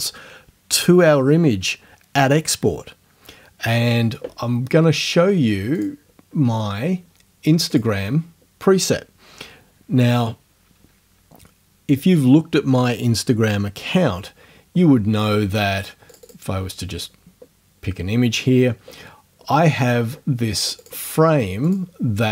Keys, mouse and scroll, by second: 5.8 click, 7.7 click, 16.1 click, 20.1 scroll down 2, 20.8 click, 21.7 click.